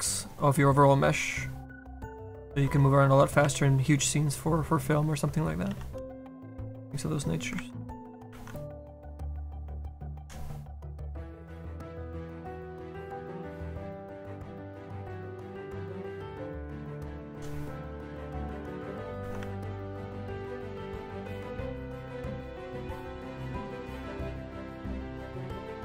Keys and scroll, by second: 2.5 ctrl+z, 3.5 s, 5.7 s, 7.5 ctrl+z, 8.3 ctrl+z, 9.1 s, 20.1 ctrl+z.